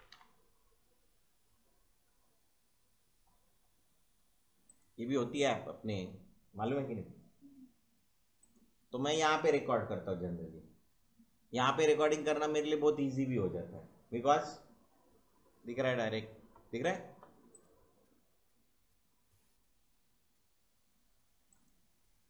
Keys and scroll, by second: 0.0-0.5 typing.